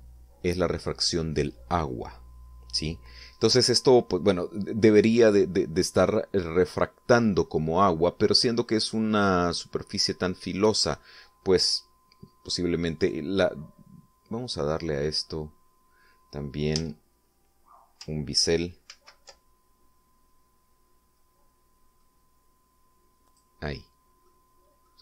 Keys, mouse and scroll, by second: 0.4 Return, 4.9 middle click, 6.2 middle click, 7.2-8.5 middle drag, 11.2 right click, 13.7 right click, 17.4 Tab, 19.6 ctrl+b, 21.8 scroll up 2, 22.6 scroll up 2, 23.3 scroll up 1, 23.9 click, 24.9 middle click.